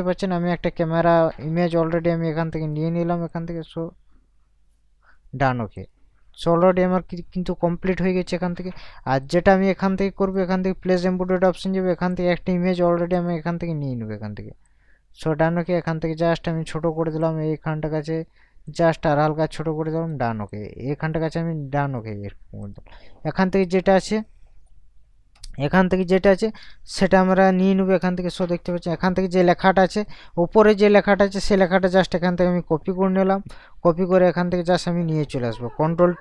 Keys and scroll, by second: 26.4 KP_Add, 28.0 ctrl+KP_Subtract.